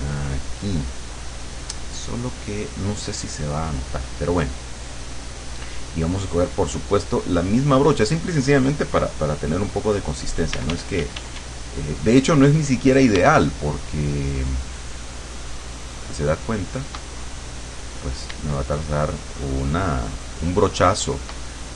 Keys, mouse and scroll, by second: 1.1 click, 3.8 click, 6.1 click, 7.5 click, 10.6 d, 14.3-17.2 shift+drag, 19.2-21.5 shift+drag.